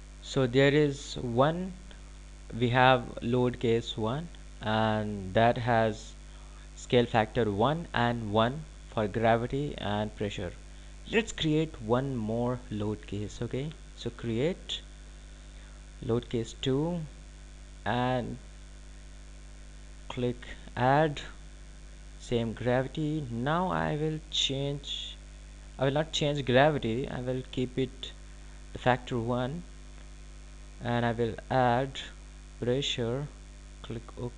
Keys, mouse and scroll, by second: 16.0 click, 18.6 click, 22.9 click, 32.3 click.